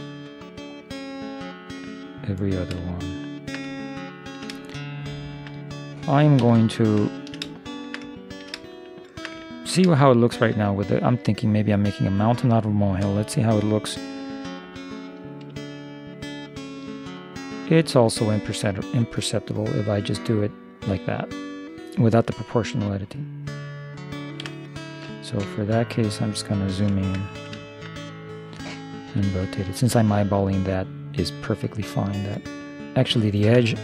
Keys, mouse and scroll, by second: 3.0-6.3 middle drag, 6.5 o, 7.1-11.7 middle drag, 11.9-13.8 drag, 14.7 r, 25.5 shift+b, 27.3 middle click, 29.2 r.